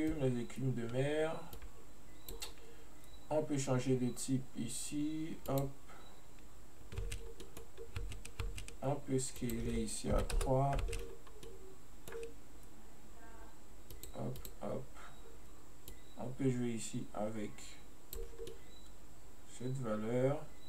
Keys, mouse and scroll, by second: 1.6-4.7 drag, 5.6 click, 7.1 space, 7.5-7.8 middle drag, 7.8 scroll up 1, 8.1 space, 8.5 space, 9.4-10.9 drag, 10.9 space, 11.4 scroll down 1, 11.6-14.0 middle drag, 14.0-18.6 drag, 18.6-20.6 middle drag.